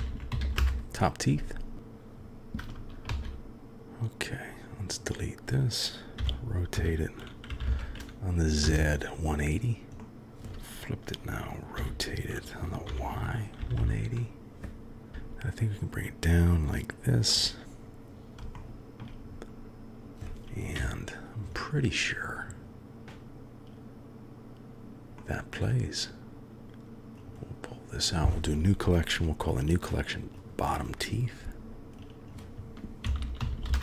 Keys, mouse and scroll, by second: 0.1 e, 3.1 shift+d, 6.2 r, 10.1 KP_3, 11.7 r, 15.1 g, 18.6-19.0 shift+middle drag, 20.7 KP_1, 25.1-26.8 drag, 27.3 click, 30.3 click, 30.4-33.8 drag, 33.4 t.